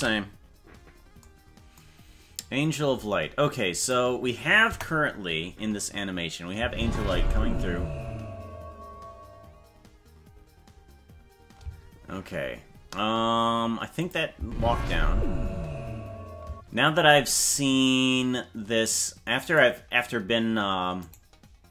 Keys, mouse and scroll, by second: 1.8 ctrl+s, 3.9 click, 4.7 KP_0, 6.6 space, 14.0 click, 14.4 space, 16.4 space.